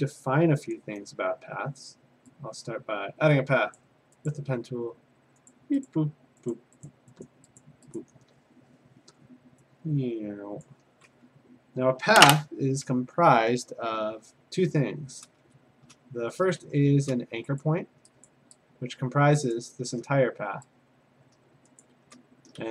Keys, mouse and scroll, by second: 3.7 click, 4.3 click, 5.5 click, 6.5 click, 7.0 click, 7.3 click, 7.6 click, 8.0 click, 10.6 click, 15.2 click, 15.4 a, 16.6 a, 17.6 click, 18.3 click, 19.5 click, 19.8 a, 21.8 shift+click, 21.9 a, 22.6 a.